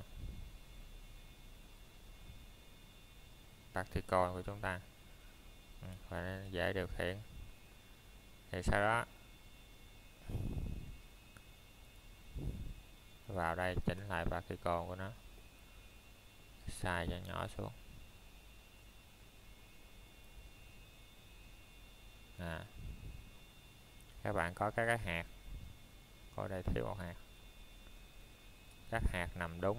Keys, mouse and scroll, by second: 2.9 click, 11.9-12.5 scroll down 1, 12.5 middle click, 13.1 shift+middle click, 13.4 scroll up 1, 15.1 middle click, 15.3-16.9 scroll down 1, 17.0 shift+middle click, 17.4 scroll up 1, 18.7 middle click, 18.9 scroll down 1, 22.3 middle click, 23.6-24.6 scroll up 1, 28.1 Tab, 29.0 click.